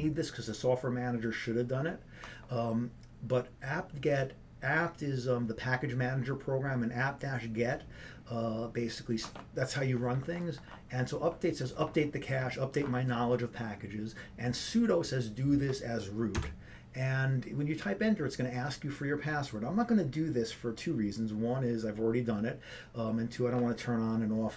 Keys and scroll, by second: 0.0-0.5 typing, 16.8 Return.